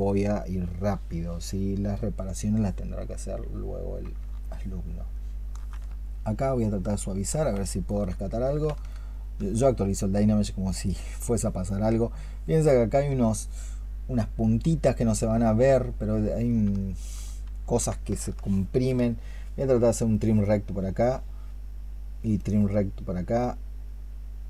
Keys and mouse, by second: 3.4 double click, 4.3 alt+click, 5.0 alt+click, 6.1 shift+click, 7.7 ctrl+click, 16.5 shift+click, 20.0 ctrl+shift+click, 22.2 ctrl+shift+click.